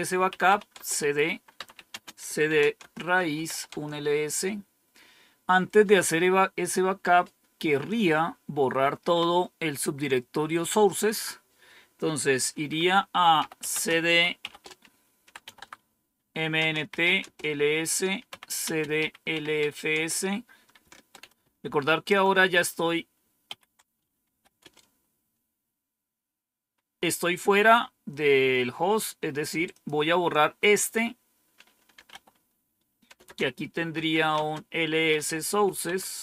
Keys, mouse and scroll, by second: 0.0-3.8 typing, 11.0 click, 13.1-19.9 typing, 16.5 Return, 21.3-22.1 typing, 23.4 ctrl++, 24.0-25.0 typing, 29.6 click, 31.6-35.6 typing, 35.8 Tab.